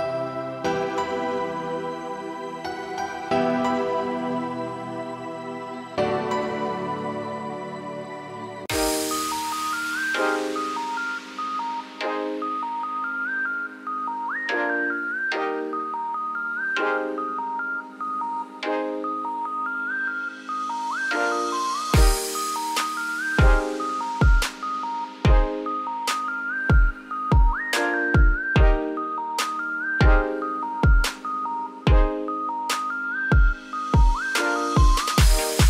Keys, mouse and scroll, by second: 0.4-1.0 scroll down 5, 1.0 s, 1.8 g, 3.1 g, 5.9 scroll down 6, 6.2-7.7 middle drag, 7.7-8.0 scroll down 4, 8.0 e, 11.5 `, 12.7 shift+middle click, 12.9-14.0 shift+scroll down 1, 14.0 `, 14.3 middle click, 14.9-15.9 scroll down 21, 15.9 middle click, 16.2-16.9 shift+scroll up 5, 16.3 shift+middle click, 17.0-18.8 middle drag, 18.8 `, 19.9 scroll down 4, 20.2 middle click, 21.4 shift+middle click, 22.0 g, 23.0-23.4 scroll up 2, 23.4 ctrl+r, 26.6-28.2 scroll up 3, 28.2 2, 28.8 click, 29.2 alt+click, 30.2 alt+shift+click, 31.5 alt+shift+click, 32.4 alt+shift+click, 33.4 ctrl+z, 33.9 alt+shift+click, 35.0 ctrl+z, 35.3 shift+middle click, 35.5-35.6 shift+scroll up 5.